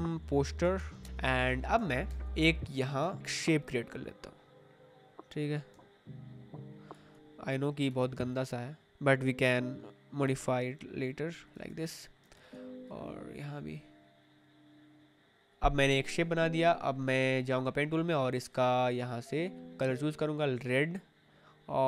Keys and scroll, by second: 0.0-2.3 typing, 5.7 space.